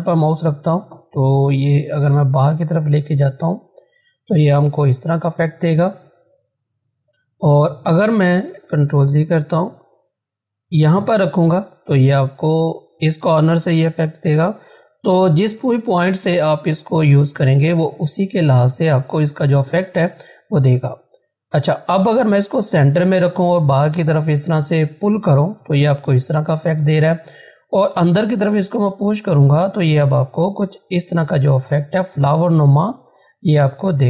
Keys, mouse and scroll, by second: 6.9 ctrl+z, 10.7-15.3 drag, 15.3 ctrl+z, 22.0-32.0 drag.